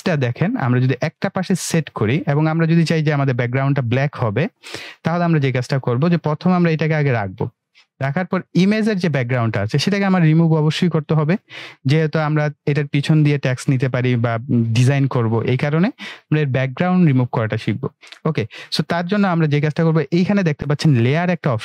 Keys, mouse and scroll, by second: 5.6-7.1 drag, 19.4 click.